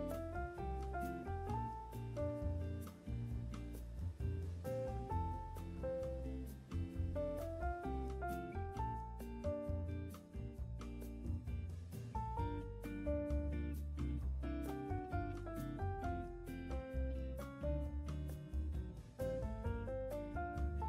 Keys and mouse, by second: 3.3 click, 4.4 click, 5.3 ctrl+z, 6.0 click, 7.1-11.6 drag, 12.3 click, 13.9-15.1 drag, 16.4 click, 17.6-20.1 drag.